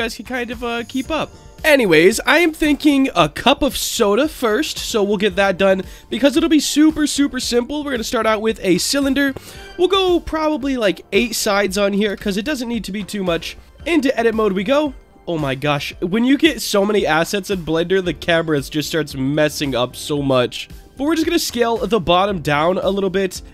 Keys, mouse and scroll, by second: 0.2 middle drag, 0.6 middle drag, 1.0 middle drag, 1.3 middle drag, 4.0-4.6 middle drag, 4.8 middle drag, 5.5-6.1 scroll up 2, 6.3 shift+a, 10.8-12.6 drag, 13.6 Tab, 14.2 middle click, 14.8 scroll down 2, 15.1 middle click, 15.9 shift+middle click, 16.6 middle click, 17.2 shift+middle click, 18.1 click, 19.2 click, 19.6 click, 20.9 s, 22.5 click, 22.5 s, 22.8 middle click, 23.4-23.5 scroll down 2.